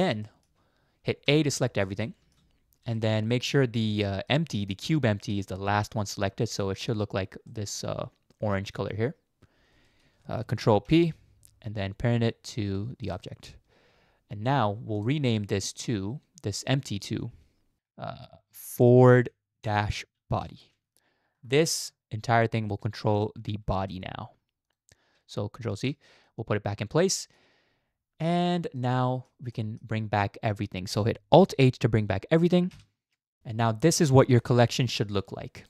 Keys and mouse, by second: 0.2 shift+middle drag, 1.3 a, 2.1 shift+middle click, 3.0 shift+middle click, 3.6 shift+middle drag, 4.0-4.3 middle drag, 5.3 middle click, 6.5 middle click, 7.5 middle click, 10.8 ctrl+p, 15.0 click, 17.8-21.4 drag, 22.7 middle click, 23.8 g, 25.9 ctrl+z, 26.3-27.4 middle drag, 28.8-29.3 middle drag, 29.5 middle click, 32.7 alt+h, 34.4 click, 34.6-35.6 drag.